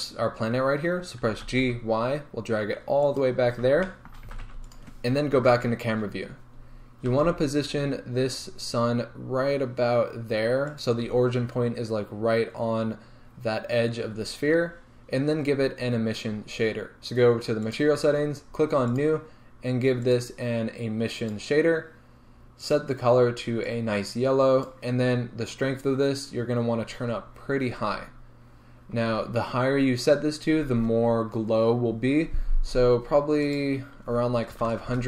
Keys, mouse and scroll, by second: 1.4 g, 3.2 click, 3.8 shift+middle click, 4.3 g, 4.8 click, 5.4 KP_0, 6.2 scroll up 1, 7.2 g, 11.0 shift+click, 14.2 scroll down 1, 19.1 drag, 21.4-23.6 drag, 25.9-35.0 drag.